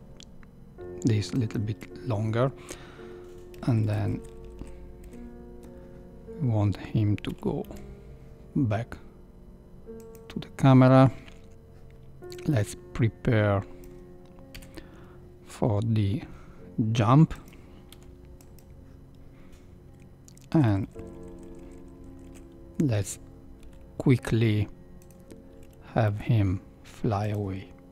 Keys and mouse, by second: 3.5 Right, 3.6 Right, 3.9 Right, 4.0 Right, 4.1 Right, 4.4 Right, 4.6 Right, 5.0 Right, 7.3 r, 12.4-13.8 drag, 15.8 KP_3, 16.2 r, 17.9 i, 20.5 Right, 20.6 Right, 20.8 Right, 21.0 Right, 21.1 Right, 21.3 Right, 21.4 Right, 21.6 Right, 21.8 Right, 21.9 Right, 22.1 Right, 22.3 Right, 23.6 r, 26.0 g.